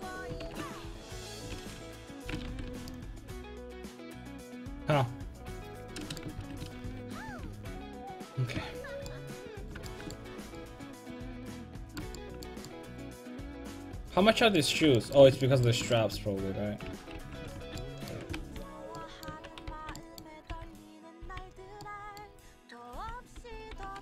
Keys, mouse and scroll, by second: 0.5 ctrl+x, 1.6 a, 1.8 a, 2.2 a, 2.5 ctrl+t, 2.7 a, 6.5 ctrl+z, 6.7 ctrl+z, 6.9 ctrl+z, 7.2 ctrl+z, 7.5 ctrl+z, 7.8 ctrl+z, 8.6 a, 15.3 Tab, 16.8 Tab, 17.2 alt+h, 17.6-21.3 typing, 23.0 l, 23.4 click, 23.8 click.